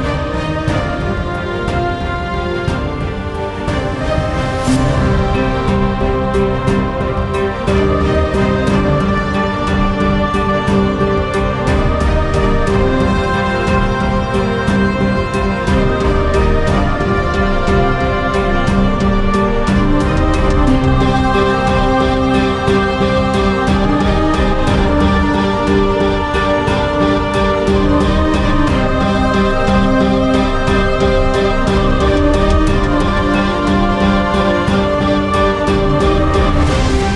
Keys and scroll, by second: 8.8-10.6 typing, 11.5 Return, 12.7-21.6 typing, 21.6 Return, 33.7-35.5 typing, 35.6 Return.